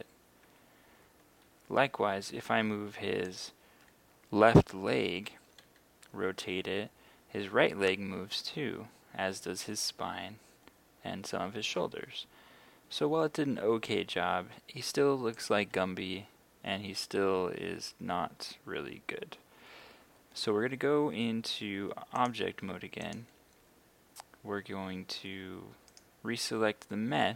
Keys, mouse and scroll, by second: 1.7 Escape, 3.3 right click, 5.7 r, 12.9 Escape, 15.4 right click, 15.7 g, 19.3 Escape, 22.2 click, 25.9 right click.